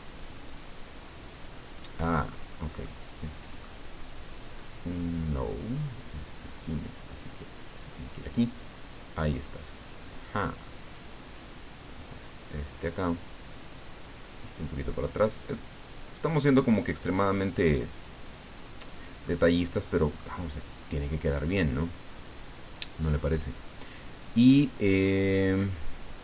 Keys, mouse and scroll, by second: 0.5-2.0 drag, 2.9 middle click, 6.1-8.3 drag, 9.2-12.8 drag, 15.0-16.9 drag, 18.0 click, 19.2-20.5 middle drag, 23.0 click, 25.5 click.